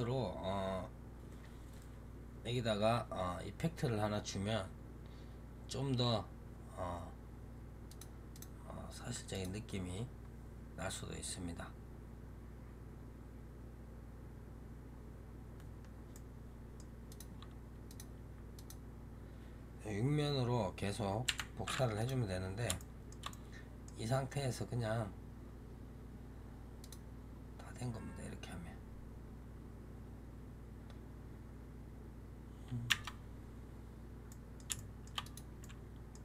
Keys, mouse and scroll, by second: 7.8 click, 8.2 click, 9.2-12.3 drag, 16.0-17.0 middle drag, 17.0 click, 17.8 click, 18.4 click, 21.1 Delete, 21.9 click, 22.7-26.7 shift+middle drag, 26.7-29.8 drag, 32.8 Tab, 34.2-35.1 middle drag, 35.1 click, 35.5-36.2 middle drag.